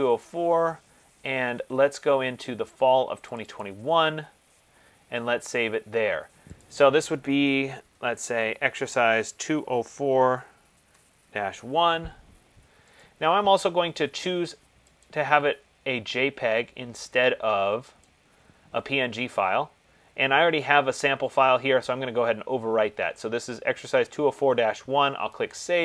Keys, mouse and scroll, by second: 0.1 click, 3.5 click, 3.8 click, 6.8 click, 8.0 typing, 9.3-11.6 typing, 13.2 click, 15.3 click, 18.3 click, 25.7 click.